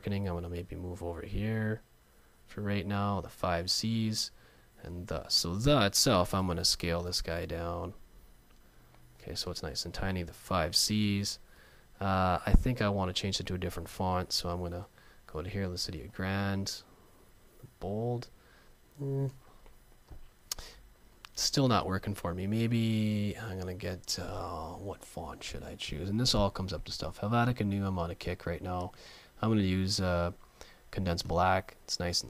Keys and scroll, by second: 6.6 alt+shift+super+,, 11.6 super+a, 14.2 super+t.